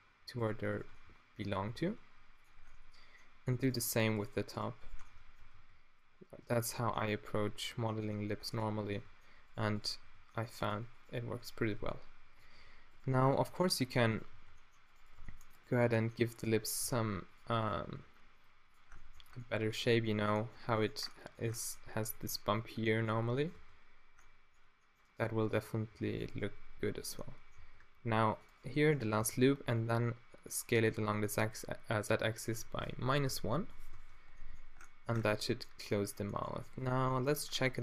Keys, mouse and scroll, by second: 0.5 click, 0.5 middle click, 0.5 right click, 1.1-2.6 right drag, 1.6 g, 2.4 click, 2.4 middle click, 3.6 middle click, 4.3 right click, 5.5 g, 7.3-8.3 middle drag, 10.0 g, 11.2 z, 11.8 g, 12.4 z, 13.3 g, 14.4 g, 15.2 g, 15.8 g, 16.9 g, 17.9 g, 19.1 Tab, 23.5 Tab, 24.8 middle click, 25.2-26.8 drag, 25.8 g, 26.4 g, 26.9 click, 27.6 a, 27.9 ctrl+r, 29.2 s, 30.6 click, 33.9 Tab, 34.3 click, 37.3 Tab.